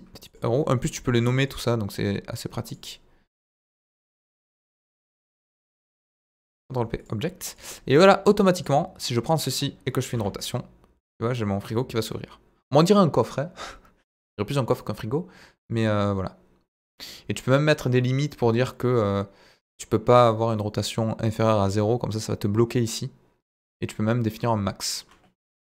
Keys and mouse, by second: 4.9 b, 6.3 ctrl+p, 7.5 click, 8.5 click, 9.0-9.5 middle drag, 10.0 r, 10.1 z, 25.3 Escape.